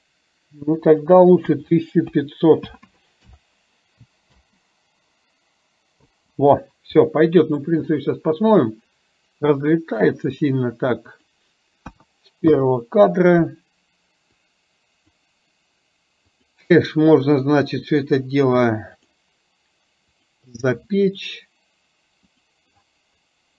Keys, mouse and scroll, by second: 0.8-3.5 drag, 2.8 KP_0, 4.5 space, 6.1 space, 7.1-7.6 middle drag, 11.2-12.7 drag, 14.6 click, 16.3 click, 19.1 click, 20.2 click, 22.5 drag.